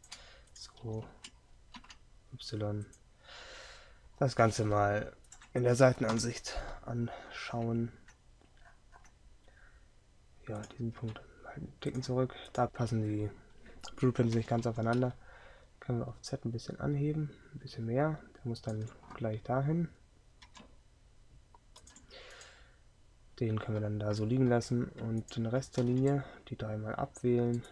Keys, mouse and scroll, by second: 0.9 g, 6.2 KP_3, 25.9 g.